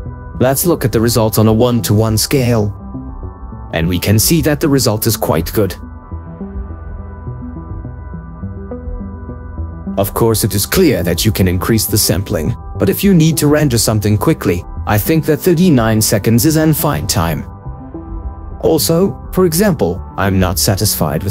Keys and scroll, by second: 0.1 ctrl+4, 5.9 ctrl+4.